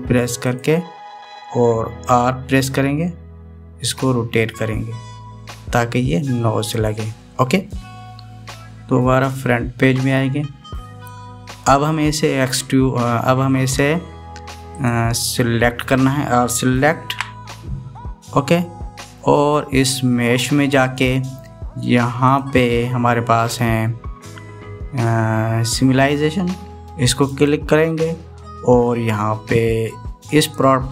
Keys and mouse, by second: 0.2 e, 3.4 r, 10.3 KP_1, 15.5 click, 17.8 a, 21.7-22.1 drag, 23.1-28.4 drag.